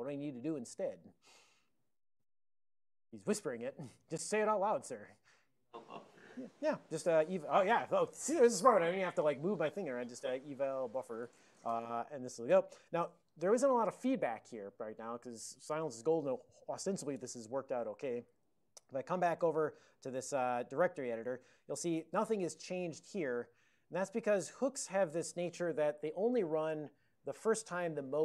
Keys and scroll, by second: 9.8-11.5 typing, 11.6 Return, 18.2 ctrl+x, 18.4 d, 19.4 Return.